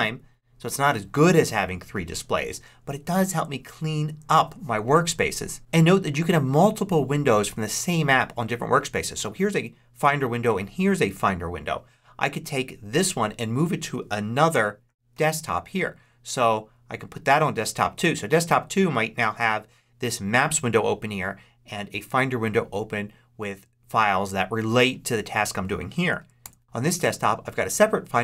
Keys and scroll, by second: 3.2 ctrl+Left, 14.4 ctrl+Up, 26.3 ctrl+Left.